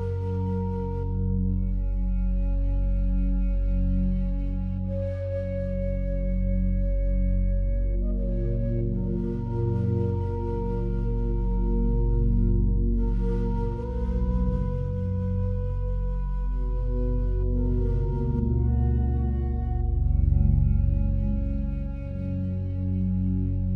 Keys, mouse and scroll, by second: 1.2-3.6 scroll down 1, 4.9-5.7 scroll up 1, 5.7 click, 7.8 Return, 9.5 click, 11.5 Return, 13.1 scroll up 1, 15.9 Tab, 16.5 right click.